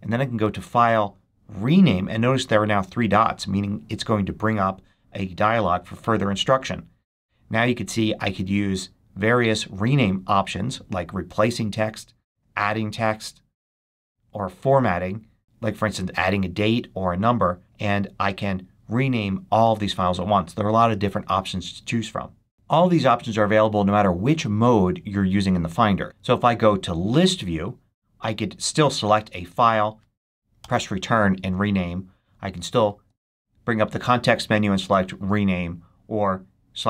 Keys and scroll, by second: 30.5 Return.